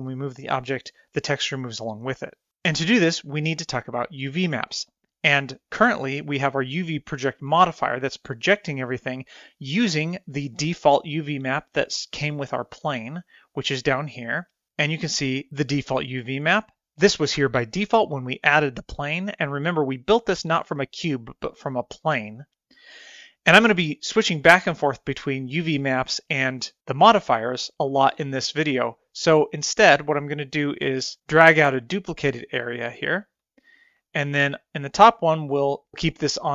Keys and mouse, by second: 13.8 click, 26.3 click, 31.4-33.8 drag.